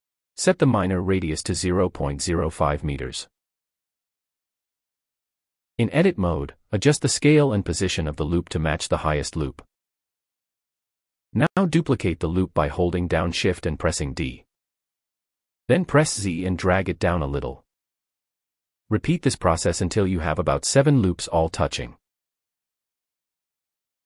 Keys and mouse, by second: 4.7 Tab, 5.9 shift+click, 6.7 g, 6.9 z, 7.8 s, 10.1 click, 12.2 shift+d, 13.8 z, 18.8 shift+d, 19.2 z, 20.3 shift+d, 22.0-24.0 typing.